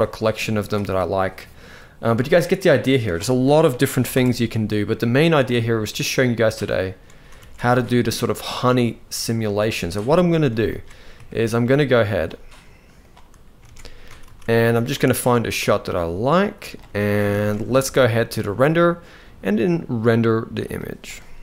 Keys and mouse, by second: 2.7-3.8 drag, 6.3 click, 7.1 alt+a, 9.2 z, 10.2 ctrl+s, 10.4 ctrl+s, 11.0 shift+middle click, 11.8 click, 11.9 right click, 13.3 alt+a, 13.8 ctrl+s, 14.0 ctrl+s, 14.4 shift+middle click, 15.2-16.4 drag, 16.9 ctrl+s, 17.1 ctrl+s, 18.3-21.4 drag.